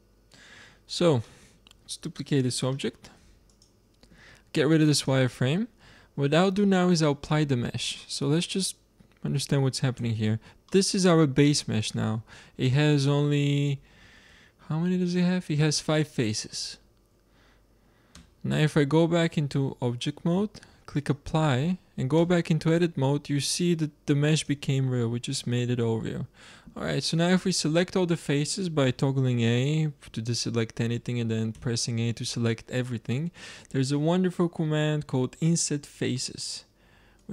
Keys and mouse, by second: 0.1-2.4 middle drag, 2.4 shift+d, 4.8-6.6 drag, 7.8-9.9 middle drag, 9.9 Tab, 14.0 a, 14.2 a, 16.6 a, 18.1 Tab, 20.9-22.7 drag, 22.0 Tab, 24.3-25.4 drag, 28.7 a, 31.4 a, 37.1-37.3 drag.